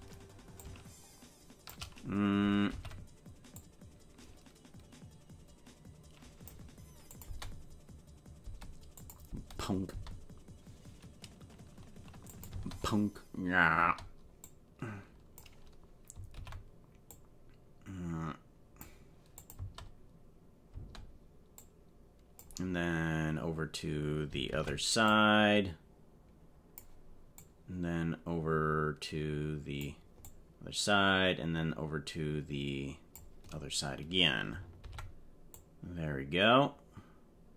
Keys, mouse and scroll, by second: 0.6-1.9 drag, 2.7 alt+r, 3.5-6.5 drag, 7.2 space, 8.5 space, 9.0 click, 9.3 space, 10.1 space, 12.3 click, 12.5 space, 13.8 space, 14.4 click, 16.3 alt+r, 17.1-18.8 drag, 19.4 click, 19.5 space, 20.8 space, 21.6 click, 24.5 alt+r, 25.0-26.8 drag, 27.6-29.9 drag, 30.3-33.3 drag, 34.8 alt+r, 35.5-37.5 drag.